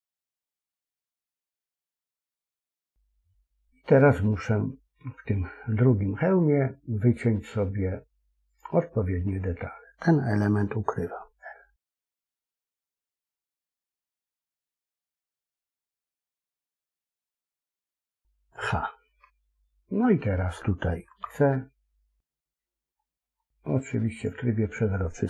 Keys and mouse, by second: 8.5 click, 12.9 l, 14.9 l, 18.4 h, 21.0 c, 24.1 click.